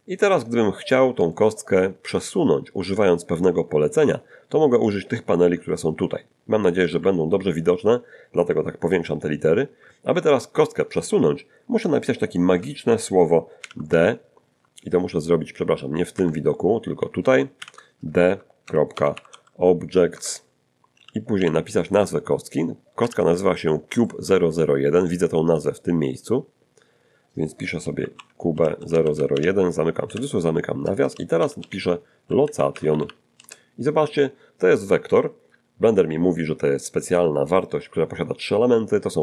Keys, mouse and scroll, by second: 1.3 shift+click, 4.2-4.9 ctrl+scroll up 2, 5.2-5.8 ctrl+scroll up 2, 7.3-7.7 ctrl+scroll up 2, 8.9-9.2 ctrl+scroll up 2, 13.6 shift+d, 13.9 shift+., 16.1 Escape, 17.6 shift+d, 18.9 ., 18.9 o, 19.1 b, 19.3 j, 20.1 Tab, 21.0 [, 21.4 ', 23.0 shift+c, 27.8-30.1 typing, 31.4-33.4 typing, 33.4 Return, 38.7 middle click, 38.7 scroll up 1.